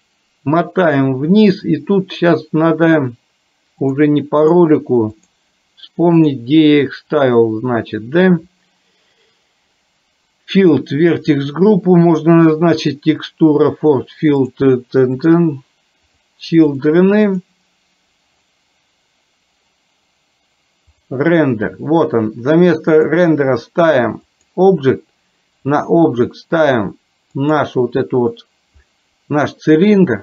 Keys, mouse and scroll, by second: 3.9 click, 4.5 click, 6.2 click, 15.2 click, 16.7 click, 17.4 click, 21.0 click, 23.0-24.6 drag, 25.7 click.